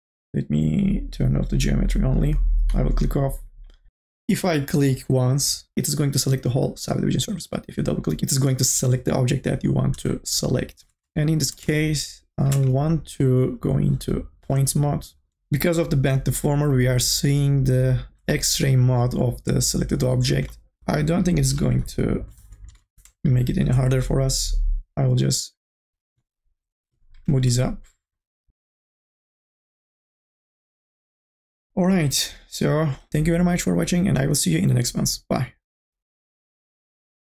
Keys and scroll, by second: 12.6 1, 20.8 2, 20.9 e, 22.6 n.